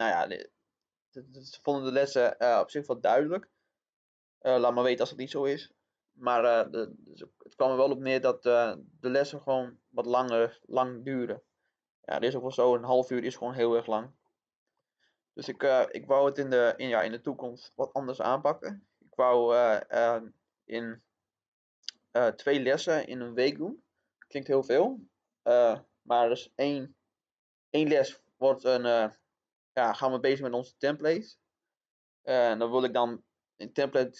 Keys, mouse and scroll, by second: 13.8-14.2 scroll down 1, 14.2-14.7 scroll up 1, 14.7 middle click, 18.5 click, 29.7-30.2 scroll down 1, 30.2 middle click, 31.0-31.4 scroll down 1, 31.4-33.4 scroll up 1.